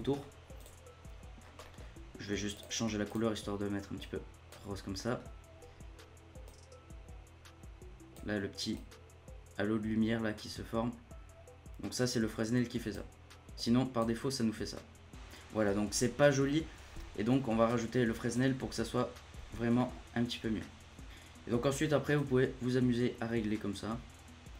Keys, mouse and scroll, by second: 0.5 click, 1.3 scroll up 1, 1.6 middle click, 1.7 scroll down 2, 1.8-2.5 scroll up 1, 2.5 click, 4.9 middle click, 5.2-5.5 scroll down 1, 5.7 scroll up 2, 6.4-11.7 drag, 13.5 click, 17.7 click, 19.7-21.1 middle drag, 21.1-22.1 scroll up 1, 22.1-24.5 drag.